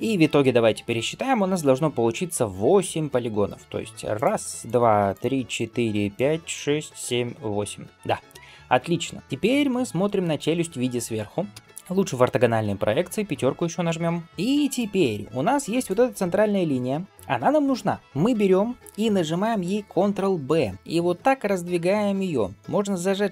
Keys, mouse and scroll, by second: 4.0-9.2 drag, 11.4 KP_7, 13.5 KP_5, 14.5 click, 15.6 alt+click, 18.0 shift+middle click, 18.0-19.0 scroll up 1, 20.3 ctrl+b.